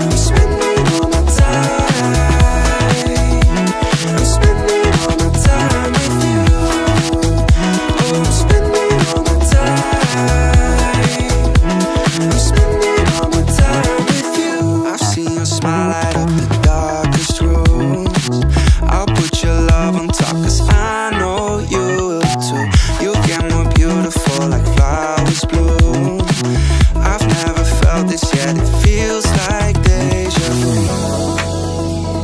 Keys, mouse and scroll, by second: 1.3-4.0 drag, 7.5 click, 9.1 click, 10.0-12.2 drag, 14.1-15.4 drag, 15.4-16.2 middle drag, 16.6-17.1 middle drag, 17.5 click, 17.9-18.8 middle drag, 20.6 click, 21.1-23.4 drag, 24.0 click, 25.2-27.8 drag, 29.4 click, 31.7-32.2 drag.